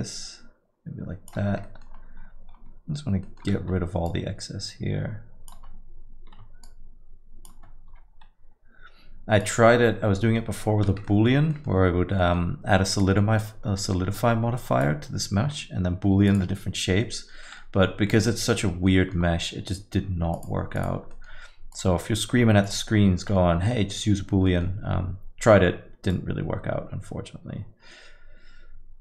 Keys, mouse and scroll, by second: 1.6 middle click, 1.9-2.7 scroll down 8, 2.5 scroll up 5, 3.2 middle click, 4.1 shift+click, 6.6 shift+click, 7.9 x, 10.1 middle click, 10.5 middle click, 10.8 scroll up 1, 11.0 middle click, 11.5 middle click, 12.2 middle click, 13.0 click, 15.4 x, 17.0 middle click, 17.4 middle click, 18.1 middle click, 18.7 Tab, 18.9 middle click, 19.2-19.5 scroll down 2, 20.3 click, 20.9 click, 21.1 middle click, 21.7 click, 22.1 scroll up 3, 22.6 click, 23.0-23.3 scroll down 2, 23.2 middle click, 24.1 Tab, 24.3 scroll up 2, 24.5 middle click, 25.7-26.1 scroll down 1, 26.3 click.